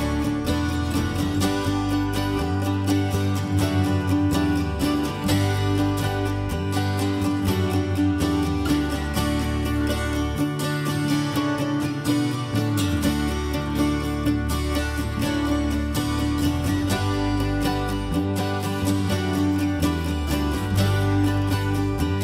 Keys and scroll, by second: 7.8-8.7 typing.